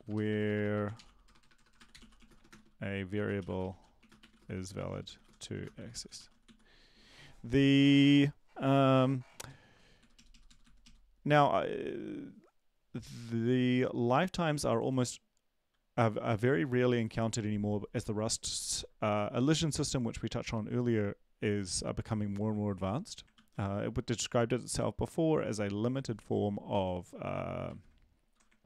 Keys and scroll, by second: 0.0-6.9 typing, 22.7 BackSpace, 22.9 BackSpace, 23.3 ctrl+s.